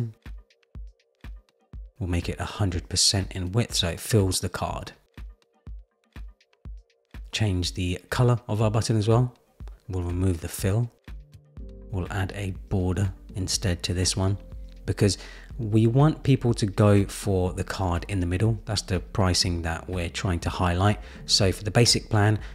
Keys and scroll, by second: 3.5 Return, 17.6 Return, 19.6 Return, 22.2 super+z.